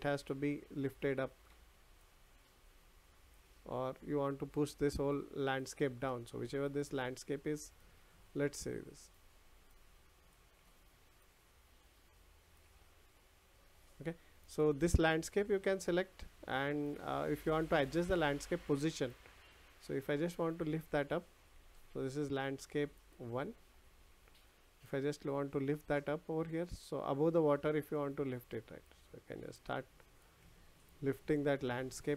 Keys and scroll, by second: 21.7 ctrl+z.